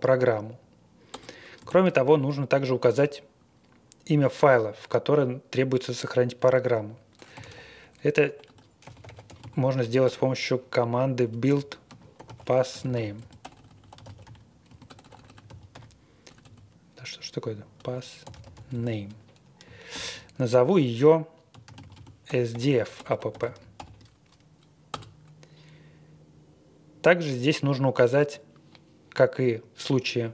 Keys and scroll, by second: 1.1 Return, 1.6 shift+;, 7.1-10.0 typing, 11.2-16.2 typing, 17.7-19.9 typing, 21.2-24.2 typing, 24.9 Return.